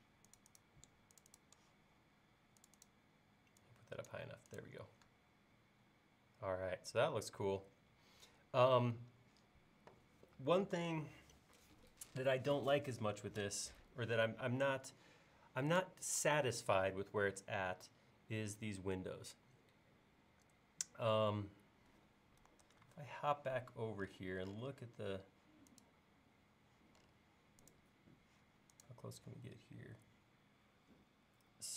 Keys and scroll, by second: 22.7 super+Tab.